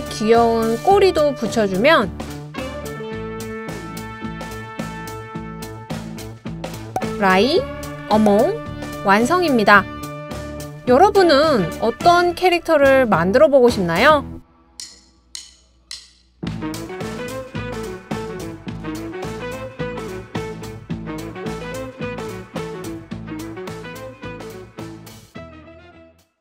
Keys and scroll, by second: 9.6-10.3 scroll down 4, 10.3 Left.